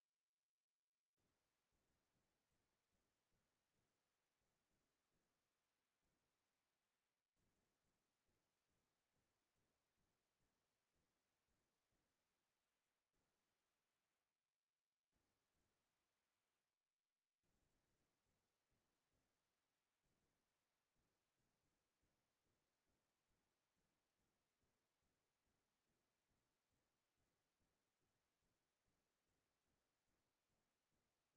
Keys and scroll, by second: 0.6-3.1 typing, 5.0-9.3 typing.